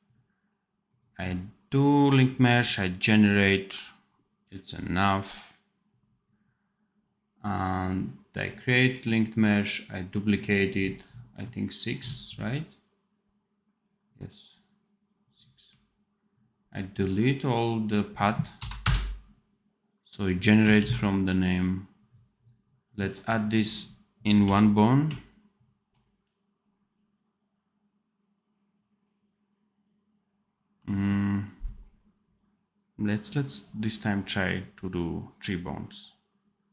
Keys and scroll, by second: 20.7 ctrl+s, 24.3 n.